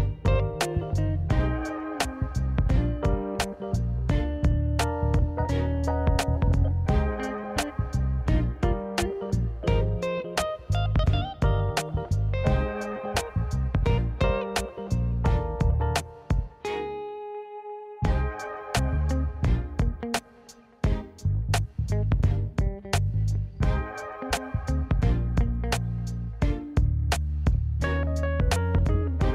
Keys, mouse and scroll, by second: 0.2 shift+g, 1.6 x, 3.0-3.8 middle drag, 3.9 shift+middle drag, 4.2-6.9 middle drag, 7.1 KP_1, 8.4 click, 9.0 click, 9.4 a, 10.4 i, 15.2-20.0 drag, 20.7-28.1 drag, 29.0 middle drag.